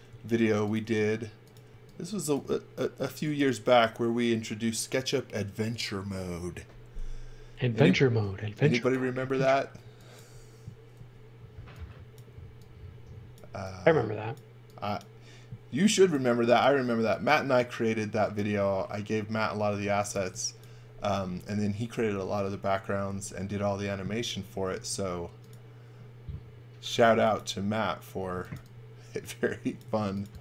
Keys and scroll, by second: 0.1 l, 1.7 e, 8.4 x, 9.8 x, 11.0 e, 19.8 x, 20.1 v, 24.7 space, 27.0 j, 28.1-29.8 typing.